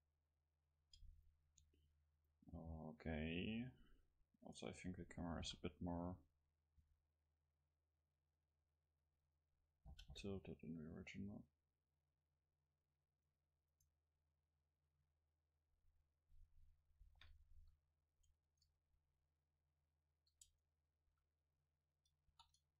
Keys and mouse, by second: 0.8-4.3 middle drag, 4.5-7.3 right drag, 5.5 r, 9.4-11.3 drag, 9.9 g, 13.3-16.4 drag, 13.7-16.4 right drag, 16.5-18.4 middle drag, 17.5 KP_7, 18.4 Tab, 20.5 Tab, 21.1 a.